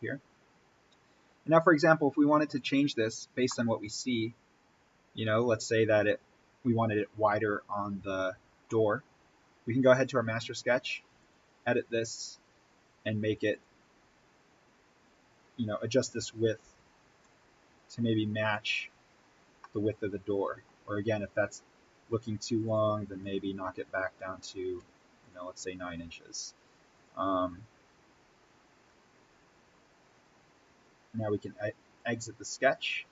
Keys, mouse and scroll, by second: 2.3 click, 3.1 scroll down 1, 3.4-9.9 middle drag, 9.9 right click, 11.1 click, 15.0-15.4 scroll up 1, 16.5 1, 18.4 click, 19.7-22.5 middle drag, 22.5 click, 24.7 9, 25.1 click, 31.9 click.